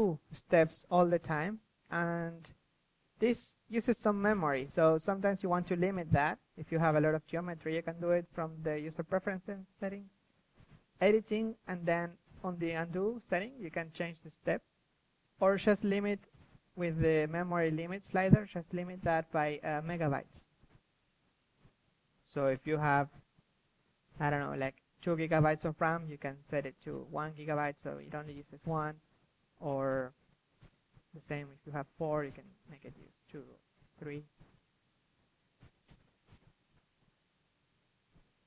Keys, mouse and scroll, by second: 2.2 z, 2.9 z, 4.0 ctrl+alt+u, 7.3 ctrl+alt+u, 21.4-27.3 drag, 27.3-27.9 middle drag, 27.9 KP_3, 28.7 KP_3, 29.0 f, 29.2-30.7 drag, 32.4-33.4 ctrl+z, 33.6 ctrl+z, 33.9 ctrl+z, 34.1-37.4 drag, 37.4-38.2 ctrl+z, 38.4 ctrl+z.